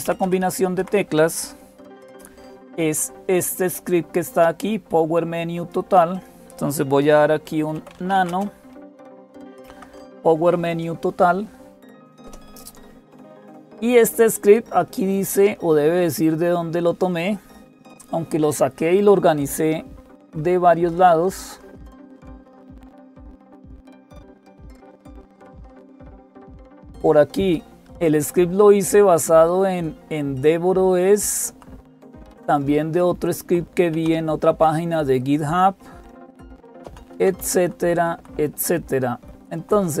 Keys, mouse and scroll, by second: 0.0-40.0 typing, 0.0 Up, 0.6 Down, 1.6 Up, 4.1-6.1 drag, 7.5 Up, 7.7 Up, 7.9 Escape, 12.0 Up, 19.8 Down, 20.0 Down, 20.2 Down, 20.4 Down, 20.6 Down, 20.9 Down, 21.1 Down, 21.3 Down, 21.5 Down, 21.6 Down, 21.8 Down, 22.0 Down, 23.6 Home, 23.8 Down, 23.8 Up, 24.0 Up, 24.2 Up, 24.4 Up, 24.7 Up, 27.6 Up, 28.2 Right, 28.9-30.3 Right, 31.3 Right, 31.3 Down, 32.0 Left, 32.7-33.7 Left, 33.7 Down, 36.9 Down, 37.2 Down, 37.4 Down, 37.6 Down, 37.8 Down, 38.1 Down, 38.3-39.4 Down.